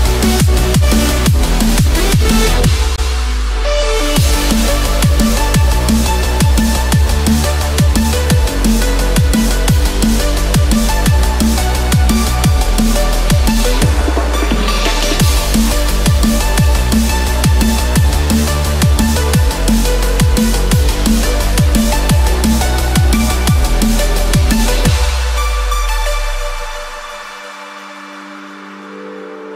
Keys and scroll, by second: 0.1 ctrl+=, 5.1 Return, 14.6 ctrl+z.